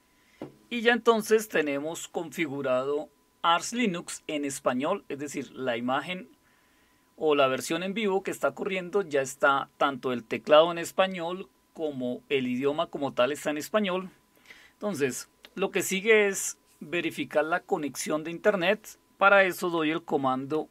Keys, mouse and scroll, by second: 1.5 Caps_Lock, 20.2-20.7 typing.